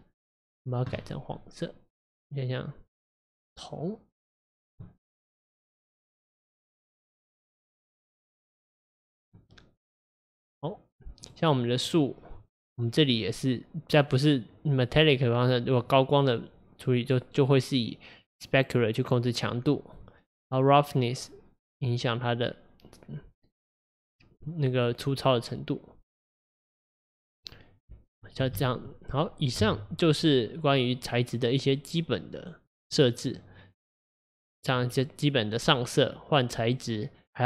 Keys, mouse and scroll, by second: 0.6 click, 6.0 click, 9.9 click, 10.4 scroll up 2, 11.3 click, 11.9 click, 15.9-19.0 drag, 21.0-24.0 drag, 27.6-28.6 scroll down 1, 28.6 KP_0, 29.7 KP_0, 33.0 click, 34.1 click.